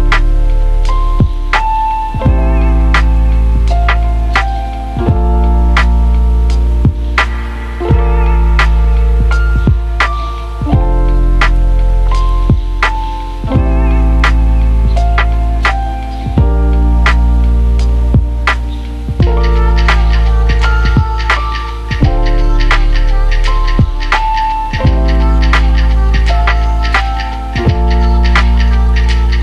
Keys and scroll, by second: 1.4-2.3 typing, 26.3 Delete.